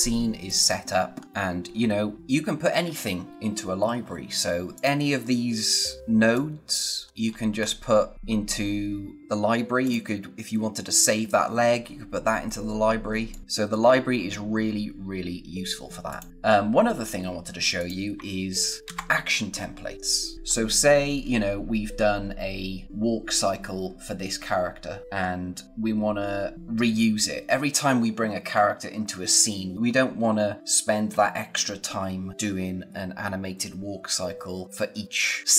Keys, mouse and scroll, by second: 0.4 click, 1.1 scroll down 1, 1.2 space, 2.5 scroll down 1, 4.0 scroll up 1, 4.7 click, 5.1-5.7 scroll down 1, 6.1 space, 6.3 click, 6.6 space, 7.0 scroll up 1, 8.1 scroll down 1, 9.8 click, 12.1-13.0 scroll down 1, 13.0 space, 13.2 click, 13.4 space, 16.0 click, 17.7 click, 18.8 ctrl+s, 20.4 scroll up 1, 24.4-25.2 scroll up 1, 26.1-26.4 scroll down 1, 29.8 scroll up 1.